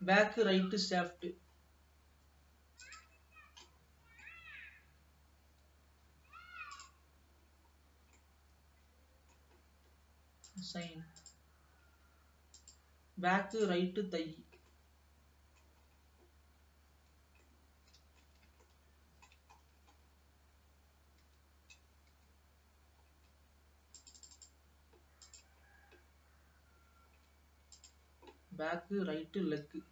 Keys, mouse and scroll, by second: 0.6-1.8 middle drag, 1.8-3.3 scroll up 2, 3.3 click, 3.9 middle click, 4.9 scroll up 1, 5.8 l, 7.1 click, 7.8-8.4 scroll down 2, 8.4-10.5 middle drag, 10.5-11.5 drag, 11.9-12.8 scroll down 1, 12.8 click, 13.7 click, 14.4 l, 15.0-16.0 middle drag, 16.0-17.2 scroll up 2, 17.2 l, 17.8-19.7 middle drag, 19.7-21.4 scroll up 5, 21.4 l, 22.3 l, 23.3-24.3 scroll down 2, 24.3 click, 25.4 click, 26.0-26.6 scroll down 1, 26.6-27.4 scroll down 1, 27.4-27.8 scroll down 2, 28.0 click, 29.1 l.